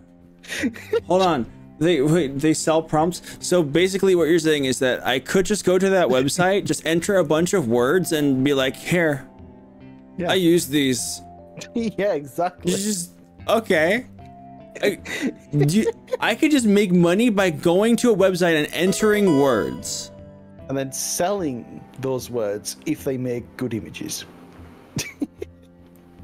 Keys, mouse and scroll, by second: 3.5 click.